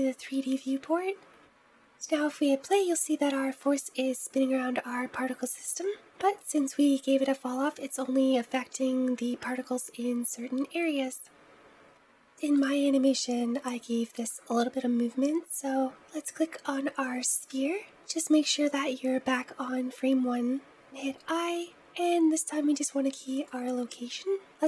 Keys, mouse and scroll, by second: 1.3 space, 16.3-17.1 scroll down 1, 17.1-18.2 scroll down 1, 18.2 scroll down 1, 18.2-23.7 drag.